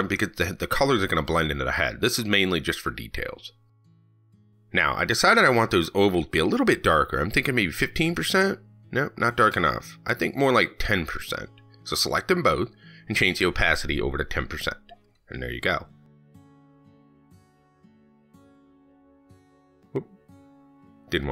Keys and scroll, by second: 19.6 ctrl+s.